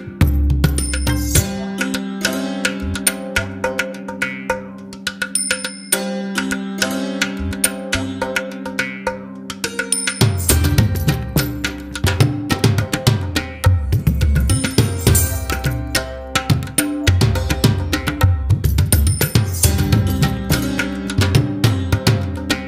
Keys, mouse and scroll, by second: 3.6-4.3 scroll down 1, 4.3-5.0 scroll up 3, 5.2-7.1 scroll down 11, 7.1-10.5 middle drag, 10.5-11.6 scroll up 4, 11.6-12.5 scroll up 3, 12.5-14.3 scroll up 2, 14.7-15.7 scroll, 18.8 click.